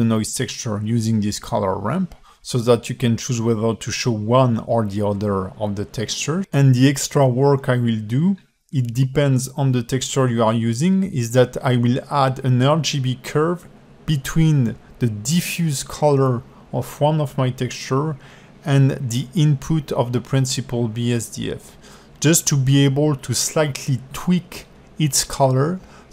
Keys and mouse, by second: 0.2 click, 1.1 click, 3.5 middle click, 4.4 alt+middle click, 4.8 alt+shift+middle click, 9.2 shift+a.